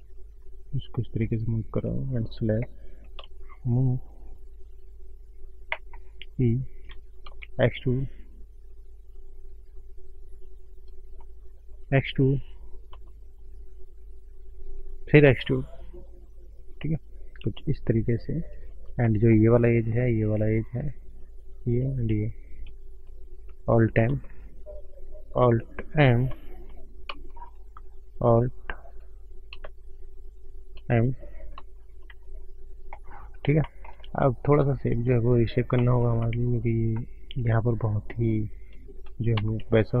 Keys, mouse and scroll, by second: 0.0 click, 1.1 click, 1.4 scroll down 1, 2.2 alt+click, 3.5 ctrl+shift+right click, 7.3 ctrl+shift+right click, 7.4 e, 11.1 shift+middle click, 13.0 shift+middle click, 13.8 e, 15.3 e, 18.5 scroll up 3, 19.0 shift+middle click, 19.6 click, 20.3 shift+click, 21.7 click, 22.0 shift+click, 24.0 alt+m, 25.2 click, 25.7 shift+click, 27.0 alt+m, 28.0 click, 29.2 click, 30.1 shift+click, 31.4 alt+click, 32.2-33.1 scroll down 10, 33.1-33.5 scroll up 5, 33.5 shift+middle click, 33.9 click, 34.9 shift+scroll up 3, 35.7 shift+middle click, 36.1 shift+scroll up 1, 36.1 shift+middle click, 36.6 scroll up 1, 37.9-38.4 scroll up 3, 39.5 ctrl+space, 39.8-40.0 scroll down 9.